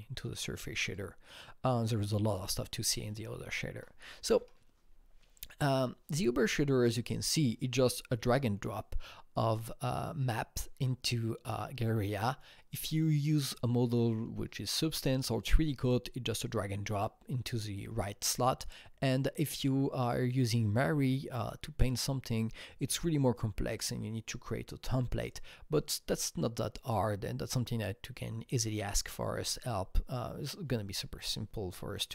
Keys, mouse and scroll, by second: 2.3 click, 3.7 Right, 4.3 Right.